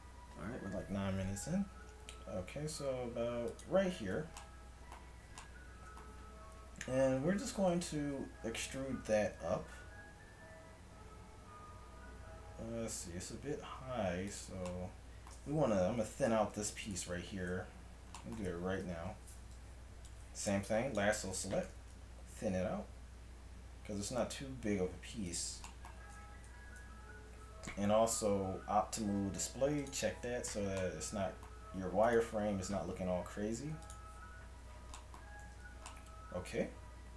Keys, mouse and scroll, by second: 1.7 s, 3.9 Tab, 7.3 Tab, 8.5 e, 14.8-16.6 middle drag, 16.6 Tab, 16.9 right click, 17.2 Tab, 19.0 KP_3, 21.7 g, 25.9 z, 26.2 Tab, 26.7 z, 27.0 a, 30.5 z, 34.6 z, 35.5 a.